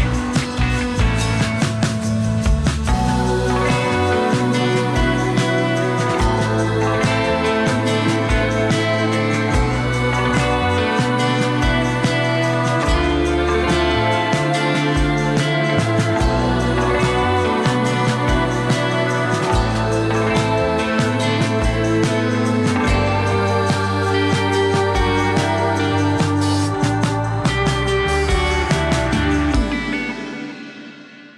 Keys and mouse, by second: 0.2 click, 0.8 click, 1.0 click, 1.4 click, 1.8 click, 2.2 click, 2.4 click, 2.8 ctrl+z, 2.8 f, 3.6 f, 4.2 click, 4.8 ctrl+z, 4.9 click, 6.1 ctrl+r, 6.5 shift+click, 7.1 middle click, 7.3 click, 7.3 3, 7.3 f, 8.1 f, 8.4 ctrl+z, 8.8 click, 9.4 middle click, 10.4 2, 10.5 click, 10.5 2, 10.5 f, 10.9 click, 11.2 click, 11.4 click, 12.4 click, 12.8 click, 13.1 click, 13.7 middle click, 14.2 shift+click, 14.5 shift+click, 14.7 shift+click, 15.7-18.2 drag, 19.0 ctrl+middle click, 19.6 shift+click, 20.1 shift+click, 21.0 click, 21.6 click, 22.0 ctrl+z, 22.3 ctrl+click, 23.0 ctrl+z, 23.3 ctrl+click, 23.9 ctrl+click, 24.5 ctrl+click, 24.8 ctrl+click, 25.5 ctrl+click, 26.1 ctrl+click, 26.3 click, 26.3 shift+z, 26.8 s, 28.3 3, 28.5 click, 29.6 e, 31.0 1.